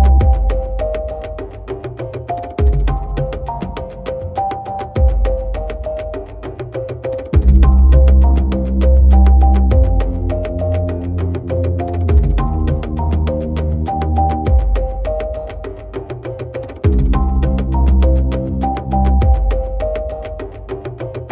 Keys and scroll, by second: 6.5 ctrl+i.